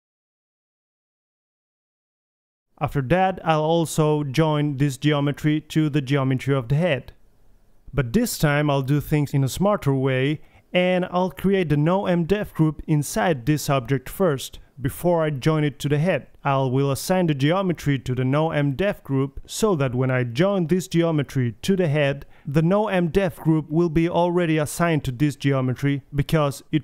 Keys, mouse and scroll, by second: 1.0-3.1 middle drag, 1.8-2.2 drag, 4.1 middle click, 4.9 middle click, 5.3 middle drag, 5.5 r, 5.9 r, 6.6 middle click, 6.8-7.3 middle drag, 7.7-10.4 typing, 8.2 click, 8.8 click, 10.0 click, 10.3-10.6 drag, 11.1 middle drag, 11.5 alt+g, 11.5-14.0 typing, 11.6 alt+r, 11.7 alt+s, 13.3 middle drag, 13.5 click, 13.9-14.3 middle drag, 15.1-15.7 middle drag, 15.1 KP_1, 15.3 a, 20.4 Tab, 20.6 a, 20.8 a, 22.0-23.5 drag, 22.5 Tab, 26.3-26.8 drag.